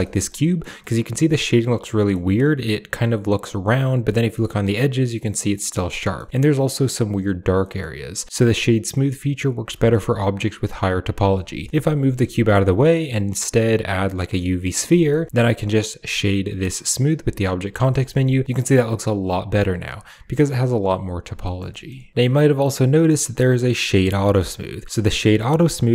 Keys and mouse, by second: 0.2-0.5 drag, 0.7-2.0 middle drag, 3.6-4.3 middle drag, 5.4-5.7 middle drag, 5.8 middle drag, 7.5 middle click, 8.8 middle click, 9.6 shift+middle drag, 11.4 g, 11.5 middle click, 11.8 click, 12.2 shift+a, 14.8 shift+middle drag, 15.2-17.3 drag, 17.8 shift+middle drag, 18.4-19.7 middle drag, 21.3 middle click, 21.6 shift+middle click, 22.1 w.